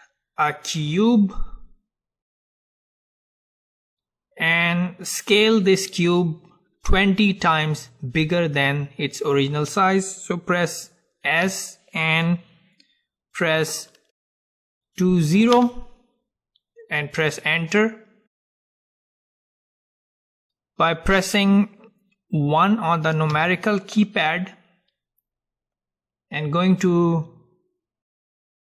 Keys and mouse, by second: 11.5 s, 17.7-23.5 middle drag, 23.5 KP_1.